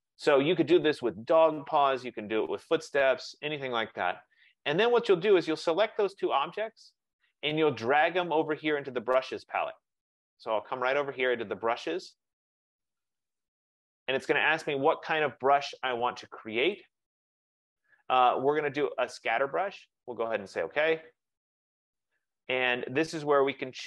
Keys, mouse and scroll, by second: 1.4 click, 4.3 click, 6.2 click, 13.4 click, 16.9 click, 20.9 click.